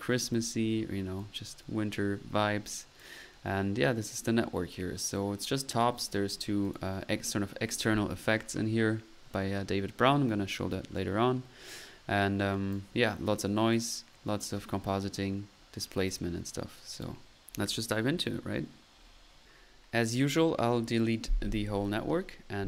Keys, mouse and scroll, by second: 3.0-3.5 drag, 4.2 click, 4.7-5.1 right drag, 5.1-6.1 drag, 6.1 middle click, 6.6 click, 9.1-9.7 scroll up 1, 11.7-12.9 drag, 13.7 click, 15.5-16.1 middle drag, 16.1-17.5 drag, 17.5 middle click, 19.4-19.9 drag, 21.1-22.2 right drag.